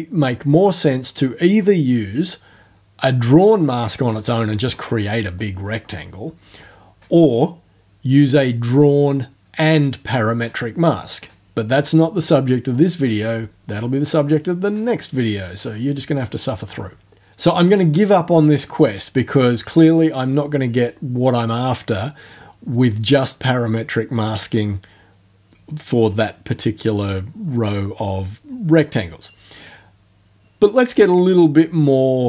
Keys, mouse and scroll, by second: 18.3 click.